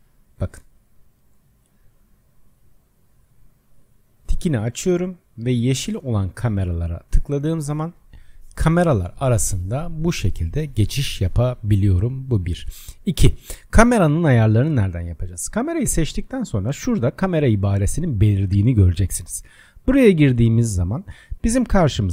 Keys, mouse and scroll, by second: 0.4 click, 1.1 click, 2.1 click, 2.7 click, 3.6 click, 4.2-5.6 drag, 6.6 click, 7.7 click, 8.4-9.6 drag, 10.1-13.1 drag, 15.6-18.6 drag, 19.1-22.0 drag.